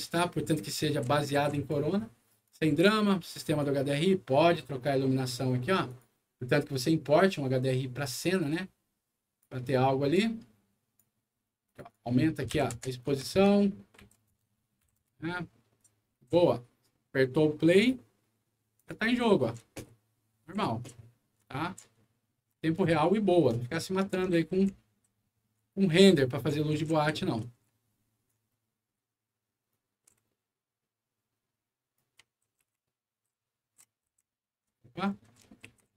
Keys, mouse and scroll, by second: 0.1-1.6 right drag, 2.4 right click, 3.3 click, 5.8 click, 8.4 click, 10.0 click, 11.6 click, 11.8 click, 12.4 2, 12.7 Return, 13.0 Tab, 13.9 2, 14.3 Return, 14.7 End, 14.9 Return, 15.7 right click, 15.8 w, 16.1 d, 17.6 click, 18.7 click, 19.1 d, 22.3 shift+click, 22.9 d, 24.5 f, 25.0 w, 26.1 d, 28.9 a, 29.6-31.9 shift+right drag, 32.5-35.9 typing.